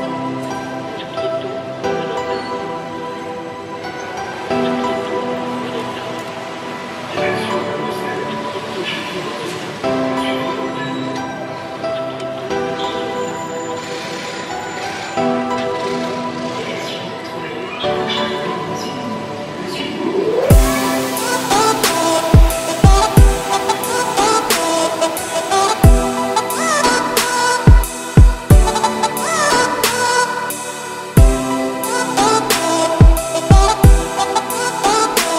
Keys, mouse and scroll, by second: 2.8 middle click, 3.4 `, 3.8 scroll up 3, 4.0 z, 4.5 click, 5.5 shift+click, 5.9-6.6 scroll up 4, 6.6 shift+click, 7.3 1, 8.7 g, 9.9 z, 10.6-11.2 scroll down 4, 11.2 middle click, 12.2 a, 13.2 g, 14.8 g, 16.0-16.3 scroll down 2, 16.3-17.4 middle drag, 17.4 g, 18.2 `, 18.7-19.3 scroll up 4, 19.3 scroll down 3, 19.4 middle click, 19.7 Tab, 19.9 click, 20.2 scroll down 2, 20.3-20.7 middle drag, 20.7 ctrl+s, 20.8-21.2 scroll up 3, 21.2-24.2 middle drag, 24.2-24.5 scroll down 3, 24.5-28.1 shift+middle drag, 28.1 click, 30.5-33.6 middle drag, 35.1 scroll up 1.